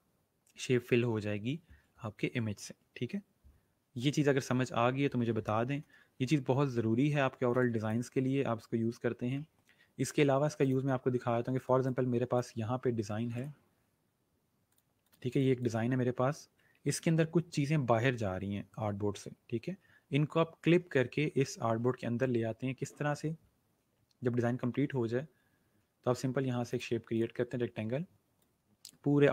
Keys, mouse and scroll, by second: 4.0 click, 6.9-7.5 alt+scroll down 2, 7.5 space, 10.6 click, 11.7 space, 11.8 click, 12.2 space, 12.5 space, 13.3 right click, 14.6 click, 15.3 space, 15.4 click, 26.7 right click, 27.1 click.